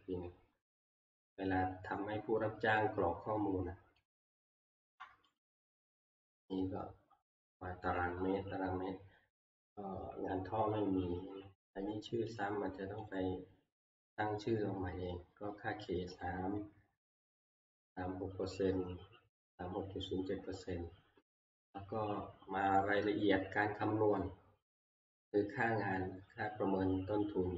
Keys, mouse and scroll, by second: 1.2 click, 3.1 click, 4.0 click, 4.9 Escape, 5.4 click, 10.0 click, 12.4 click, 13.1 click, 16.2 click, 19.1 click, 22.8 click, 24.3 scroll, 27.2 scroll.